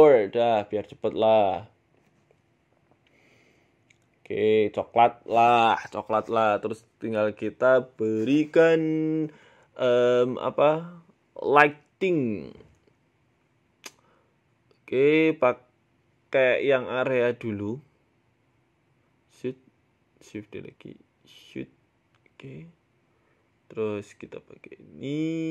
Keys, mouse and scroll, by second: 10.3 click, 11.6 shift+a, 14.6 KP_3, 15.9 r, 17.8 g, 17.8 KP_7, 18.3 scroll down 2, 18.4 scroll up 1, 18.5 shift+middle click, 19.1 r, 20.1 shift+d, 21.5 r, 23.0 middle click, 24.1 click, 24.5 click.